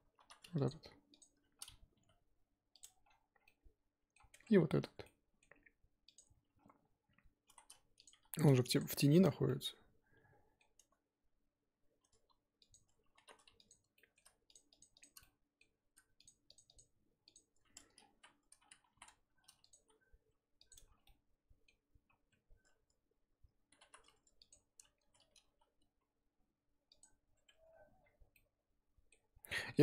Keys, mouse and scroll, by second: 0.6 alt+click, 1.2 alt+click, 2.0 g, 2.8 Tab, 3.0-3.4 scroll down 7, 3.4 middle click, 4.1-4.7 scroll up 9, 4.3 Tab, 4.7 3, 5.0-6.1 middle drag, 6.1 alt+click, 7.4 s, 8.1 g, 8.9 Tab, 9.2 scroll down 1, 9.4-10.7 middle drag, 10.7 Tab, 12.1 a, 12.7 click, 13.9 middle click, 14.7 shift+click, 15.2 middle click, 15.7 scroll up 4, 16.5 shift+click, 18.8 s, 19.7 g, 20.7 Tab, 21.0 scroll down 1, 21.0-22.3 middle drag, 22.3 Tab, 22.7 a, 24.5 alt+click, 25.5 g, 27.5 Tab, 27.7-28.3 scroll down 8, 28.3-29.3 middle drag, 29.3 scroll up 2, 29.5 middle click.